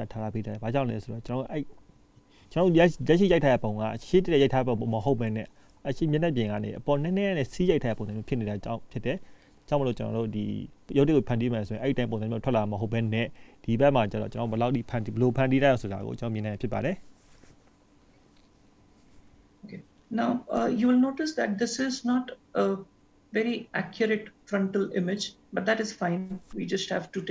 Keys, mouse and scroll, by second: 2.8 ctrl+s, 16.5 ctrl+s, 19.7-20.4 scroll up 1, 20.4 scroll down 1.